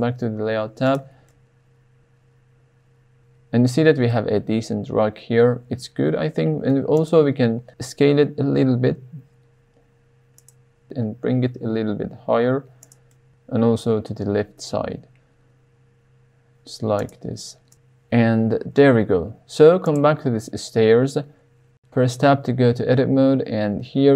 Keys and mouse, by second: 1.3-2.1 middle drag, 2.3 middle click, 4.1-6.7 middle drag, 6.9 click, 8.5 s, 10.4 click, 11.0 g, 11.4 z, 12.8 drag, 13.1-13.9 middle drag, 13.9 g, 14.0 x, 17.0 click, 21.4 Tab, 21.6 middle click, 22.4-22.8 shift+middle drag, 23.2 middle click.